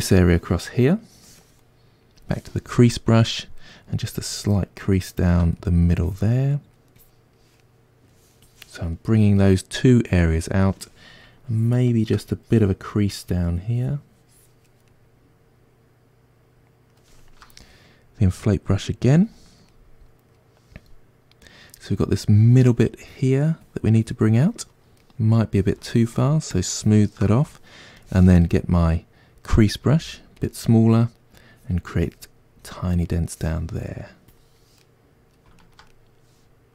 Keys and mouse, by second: 2.9-4.4 middle drag, 4.4-5.6 ctrl+drag, 5.6 middle click, 6.1 click, 6.5 middle click, 7.0 click, 7.6 middle click, 8.5 click, 9.0-11.5 middle drag, 11.5-14.9 ctrl+drag, 14.9-19.1 middle drag, 19.1 click, 19.7-22.4 middle drag, 22.4-25.0 drag, 25.0 middle click, 25.9-28.5 shift+drag, 28.5-31.6 middle drag, 30.0 f, 31.6-33.1 drag, 33.1 middle click, 33.8-34.8 drag, 34.8-36.7 middle drag.